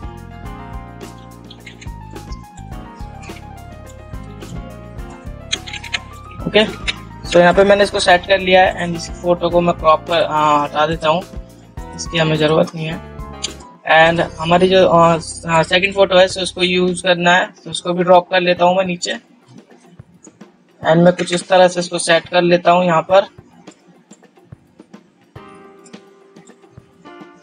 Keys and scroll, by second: 2.0 ctrl+0, 7.1 ctrl+0.